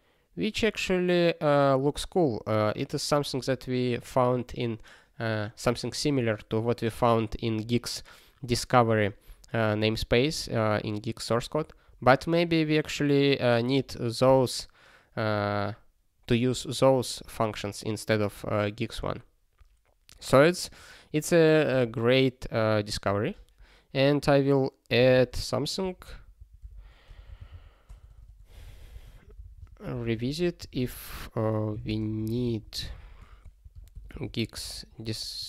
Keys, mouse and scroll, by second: 23.3 ctrl+e, 25.0 ctrl+n, 25.1 ctrl+n, 25.2 ctrl+n, 26.0 ctrl+a, 26.3 ctrl+n, 26.6 Return, 26.7 ctrl+p, 26.9-35.4 typing.